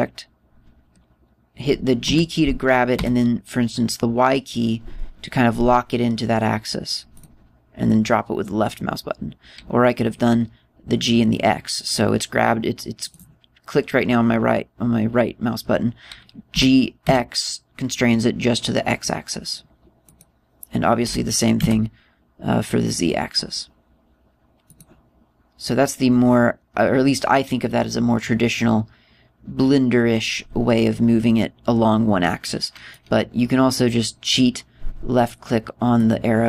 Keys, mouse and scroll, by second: 2.7 g, 7.9 click, 13.7 right click, 17.2 g, 20.9 click, 21.8 g, 25.5 click, 33.6 click, 35.9 click.